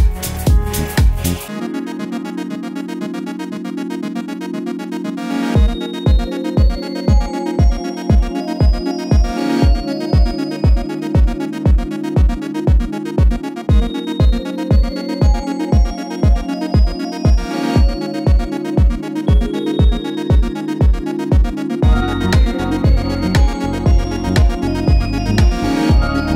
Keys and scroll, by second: 2.8 Right, 2.9 Right, 3.0 Right, 4.1 2, 4.4 Return, 4.4 0, 6.9 super+d, 7.2 Up, 7.2 Up, 7.3 typing, 8.4-9.3 typing, 10.3 typing, 10.9 Left, 11.2 Up, 17.1 super+z, 17.5 super+c, 18.6 super+v, 25.7 super+d.